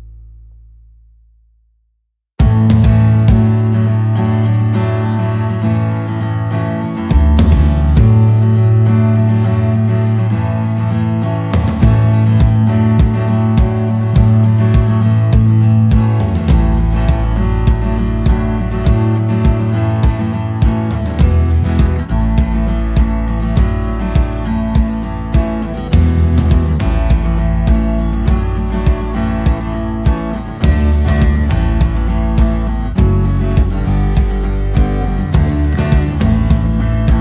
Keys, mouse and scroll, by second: 0.7 click, 1.2 click, 1.4 middle click, 2.0 click, 2.4 scroll up 4, 2.6-3.4 scroll down 6, 2.8 click, 3.4 click, 3.6 click, 4.0 click, 4.4 click, 4.8 click, 6.4-6.7 scroll up 9, 6.7 middle click, 7.2 click, 7.4 scroll down 3, 7.6 middle click, 8.0 right click, 8.6 middle click, 9.2 click, 9.9 click, 10.6 click, 11.9 click, 11.9 middle click, 12.4 click, 13.3 click, 14.0 middle click, 14.0 scroll up 1, 14.4 scroll down 3, 14.6 middle click, 14.8 click, 16.9 Tab, 17.5 l, 17.8 p, 18.8 click, 19.6 click, 19.9 click, 20.0 right click, 21.8 click, 22.3 r, 23.5 click, 24.8 click, 25.1 click, 25.4 click, 26.1 right click, 26.9 r, 28.5 click, 29.6 r, 30.8 click, 31.3 click, 31.8 click, 32.3 click, 32.5 middle click, 34.0 middle click, 34.0-34.4 scroll up 1, 35.5 click, 36.1 click.